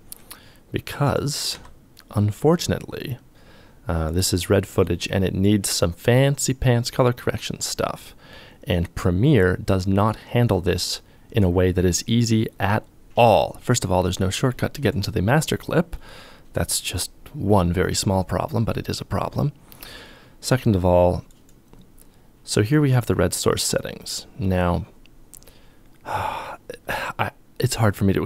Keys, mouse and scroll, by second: 0.3 c.